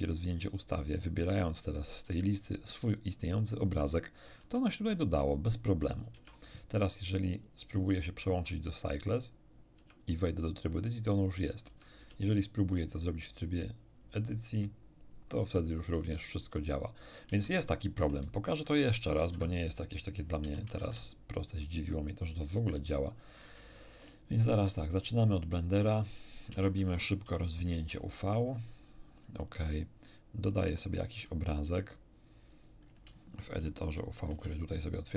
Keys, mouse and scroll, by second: 0.5 click, 3.4 click, 4.5 a, 4.8 a, 6.1 Tab, 7.3 click, 9.1 click, 9.7 Tab, 11.6 Tab, 11.9 Tab, 12.9 click, 13.3 click, 13.9 click, 14.9 click, 16.0 click, 16.5 click, 17.3 Tab, 19.1 ctrl+n, 19.4 ctrl+click, 20.4 x, 20.5 shift+click, 20.7 shift+a, 22.8 click, 23.7 shift+middle click, 24.8 click, 25.3 click, 25.9 scroll up 2, 26.5 Tab, 27.2 u, 27.9 click, 29.1 click, 30.5 click, 34.1 shift+F10.